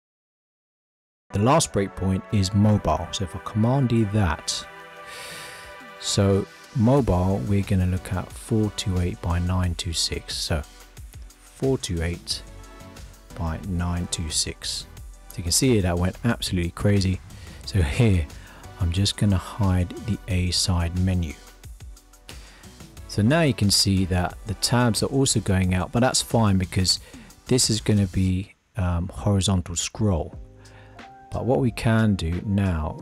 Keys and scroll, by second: 4.2 super+d.